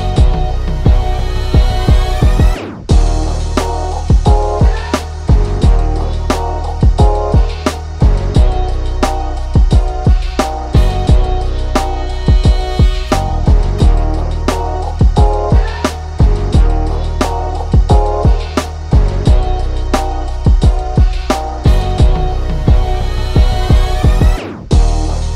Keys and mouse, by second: 0.7 click, 3.7 click, 7.2 click, 8.8 click, 10.0 click, 11.9 click, 12.6 click, 13.9 right click, 14.2 click, 14.6 right click, 14.9-17.2 drag, 18.8 click, 19.0 shift+click, 22.8 click.